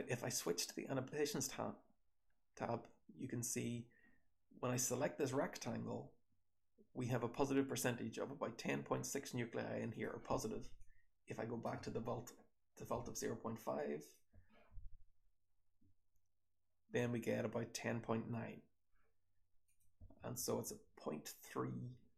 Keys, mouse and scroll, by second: 0.4 click, 0.4-3.3 scroll down 1, 3.3-8.6 scroll down 1, 8.6-9.9 scroll down 1, 9.9 click, 9.9-10.7 scroll down 1, 19.6 click, 20.1 h, 20.6 h, 21.6-22.1 scroll down 1.